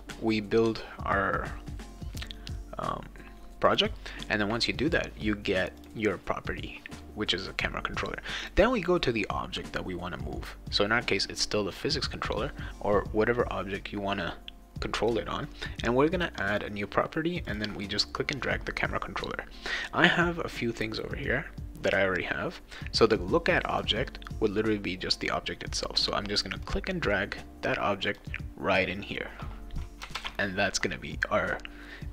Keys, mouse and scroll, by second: 3.7 click, 5.8 click, 8.4 click, 16.5 click, 17.5 click, 23.7 click, 26.6-28.2 drag, 30.1 ctrl+s.